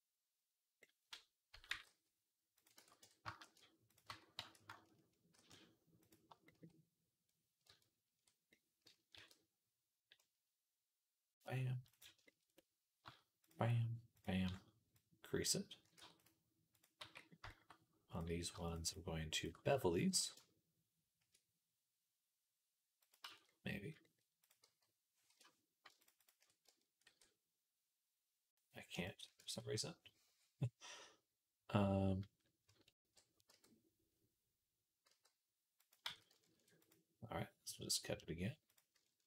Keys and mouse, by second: 1.3 a, 1.5 g, 2.6 ctrl+z, 2.8 Tab, 3.2 shift+s, 3.9 Tab, 3.9-7.5 drag, 4.2 a, 5.2 shift+s, 7.5-13.2 ctrl+middle drag, 9.0 ctrl+r, 13.2 alt+shift+click, 13.3 alt+shift+middle click, 14.0 alt+shift+click, 14.1 alt+shift+middle click, 14.8-18.0 drag, 15.8 Tab, 16.1-18.0 middle drag, 16.1-25.7 right drag, 16.8 Tab, 18.5 alt+shift+click, 18.5 alt+shift+middle click, 18.7 alt+shift+click, 18.7 alt+shift+middle click, 20.0 ctrl+b, 23.1 ctrl+z, 24.5 g, 25.8 alt+shift+click, 25.8 alt+shift+middle click, 25.8 alt+shift+right click, 26.1 alt+shift+click, 26.1 alt+shift+middle click, 26.1 alt+shift+right click, 26.9 ctrl+b, 29.2 ctrl+z, 32.3-39.2 ctrl+drag, 33.0 ctrl+b, 35.9 ctrl+z, 36.4 ctrl+r.